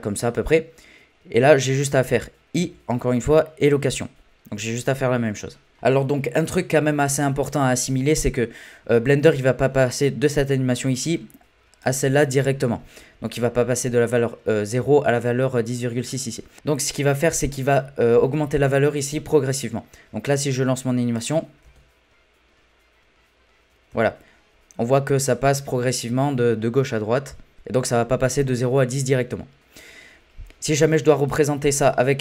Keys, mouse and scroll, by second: 0.1-0.8 scroll up 2, 0.8-1.4 scroll down 1, 2.6 i, 11.8-14.8 drag, 20.4-21.6 drag, 21.6 space, 23.9 space, 25.0-27.5 drag, 27.5-30.1 middle drag, 30.9 click.